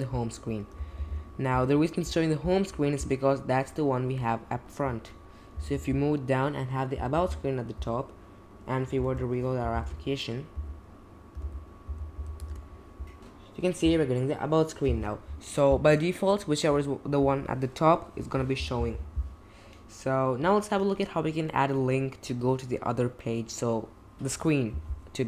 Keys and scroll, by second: 0.9 super+j, 5.6 alt+Down, 7.1 super+Tab, 9.0 super+Tab, 9.7 super+j, 10.5 r, 11.4 super+j, 11.8 super+j, 12.1 super+j, 12.4 super+Tab, 18.2-18.5 scroll down 1, 18.7 alt+Up.